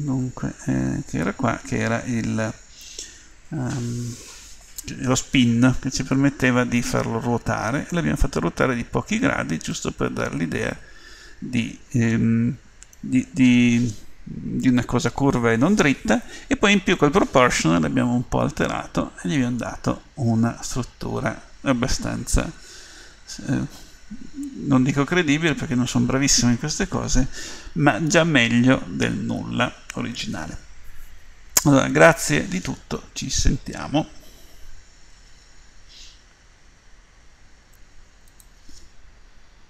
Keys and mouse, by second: 6.9-9.2 middle drag, 9.8-11.1 middle drag, 18.8 middle click, 20.0 middle click, 25.8 middle click, 27.9-28.9 middle drag, 29.2 middle click, 35.1 Escape.